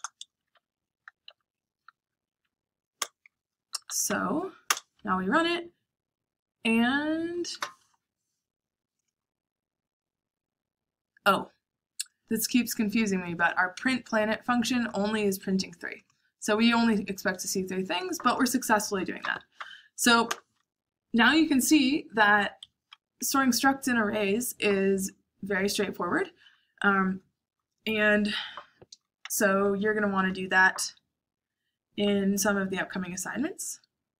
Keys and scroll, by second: 0.0-0.3 typing, 0.5 Up, 1.2 Up, 1.9 Up, 2.3 Up, 3.2 Return, 3.6 Up, 3.8 Up, 4.0 Up, 4.7 Return, 19.0 Up, 19.2 Up, 19.5 Up, 20.2 Return, 22.6 Escape, 29.2-30.1 typing.